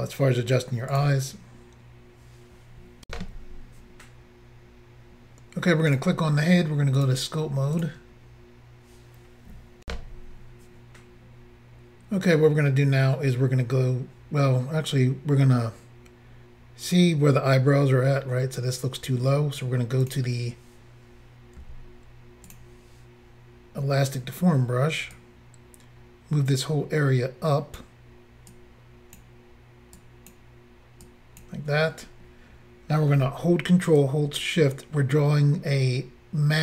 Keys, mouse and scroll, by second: 0.9 click, 1.0 click, 3.1 Insert, 5.9 click, 7.0 click, 7.0 click, 7.8 click, 9.8 Insert, 20.0 click, 21.6 f, 22.5 click, 25.1 click, 28.5 click, 30.0 click, 31.1 click.